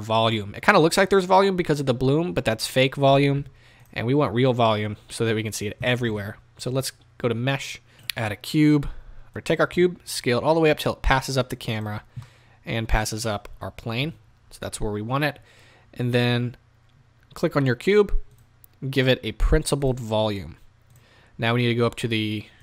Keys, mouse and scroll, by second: 3.8 z, 9.3 s, 11.8 click, 12.1 scroll down 2, 12.2-19.0 middle drag, 14.0 KP_0, 19.0 drag, 20.9-22.6 drag.